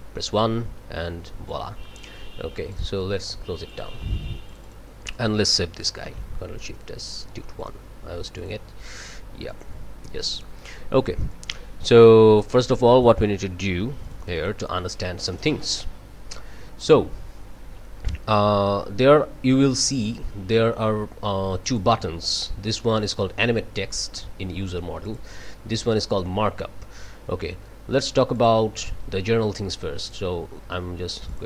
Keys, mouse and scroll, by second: 1.5-2.2 drag, 2.7 click, 3.7 click, 4.5 click, 5.1 ctrl+click, 6.0 ctrl+shift+s, 7.6 click, 8.4 click, 9.5 click, 10.3 click, 10.6 click, 11.3 click, 12.0-13.2 drag, 14.0 click, 15.3 click, 21.6 click, 25.0 click, 28.3 click, 30.0 click, 31.3 click.